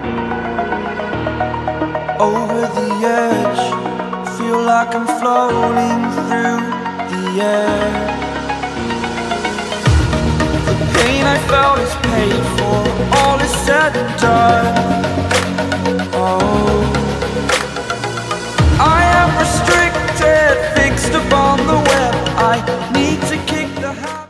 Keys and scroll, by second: 17.7 ctrl+g.